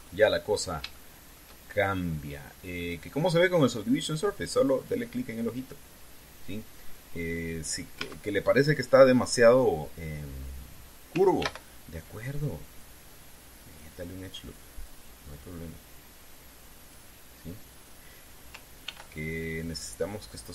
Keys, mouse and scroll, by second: 0.1 shift+middle click, 1.2-1.6 shift+scroll up 4, 1.7 shift+middle click, 3.5 click, 5.5 click, 8.7 Tab, 12.1 ctrl+r, 13.4 click, 17.5 click, 19.6 ctrl+r, 20.3 click.